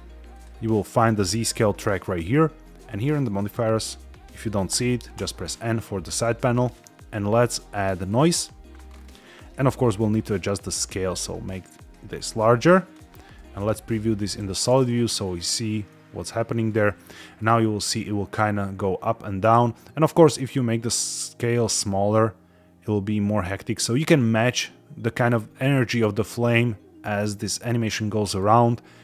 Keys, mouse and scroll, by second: 0.2 click, 0.9 click, 2.9 click, 4.7 n, 5.0 n, 6.6-8.1 drag, 8.8-9.2 scroll up 4, 9.5 shift+middle click, 10.6-12.8 drag, 13.3 z, 14.6 space, 15.8-16.3 middle drag, 16.7 shift+middle drag, 17.1 middle click, 20.0-23.3 drag, 25.0 scroll down 2, 28.3-28.9 scroll up 4.